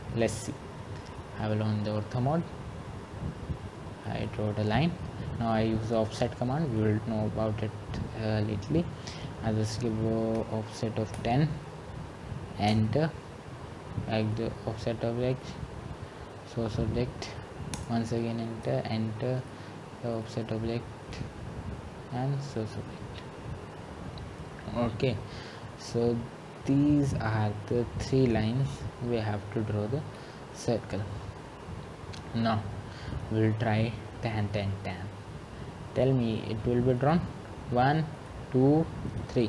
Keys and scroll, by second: 12.8-13.5 typing, 23.0-23.8 typing.